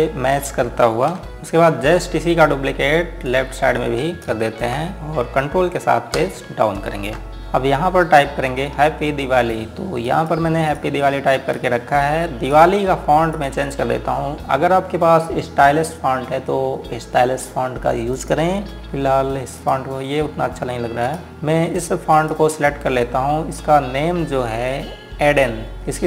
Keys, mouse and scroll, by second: 3.9 click, 4.6 ctrl+right click, 7.0 Page_Down, 7.7 Left, 8.5-9.5 scroll up 1, 9.5 scroll down 1, 10.8 click, 12.6-13.3 scroll up 1, 13.3 click, 18.7 click.